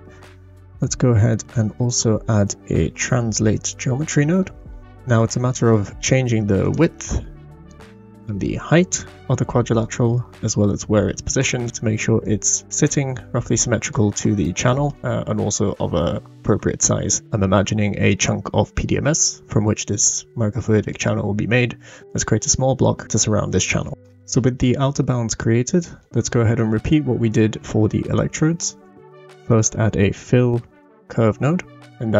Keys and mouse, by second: 1.5 shift+a, 6.8 click, 8.8-9.9 drag, 10.8 click, 12.2-13.9 drag, 20.0-20.9 middle drag, 23.9 middle click, 25.4 middle click, 26.7 middle click, 27.3 click, 27.6-28.7 drag, 28.9 shift+a, 30.7 l.